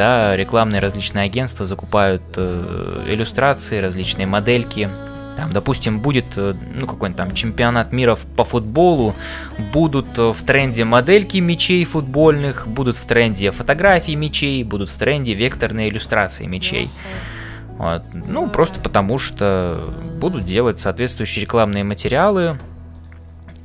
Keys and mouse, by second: 0.0-23.6 typing, 0.2 click, 4.7 shift+middle click, 5.8 ctrl+r.